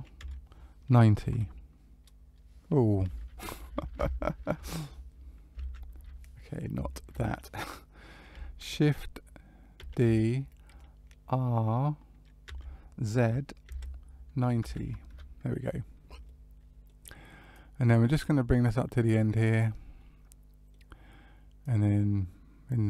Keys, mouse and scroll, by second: 9.7 shift+d, 16.2 middle click, 17.5 click, 19.9 middle click, 21.6 click.